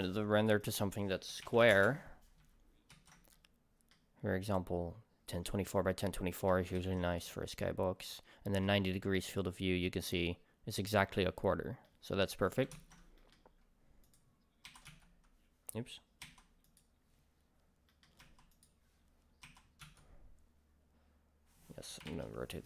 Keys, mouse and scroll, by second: 0.6-3.3 drag, 1.7 4, 1.8 Return, 3.1 ctrl+s, 3.3-14.1 middle drag, 4.2 scroll up 1, 6.8 ctrl+s, 11.6 scroll down 2, 12.7 ctrl+s, 14.1 click, 16.5 r, 16.7 click, 17.9-18.6 middle drag, 18.2 r, 18.6 click, 19.4 r.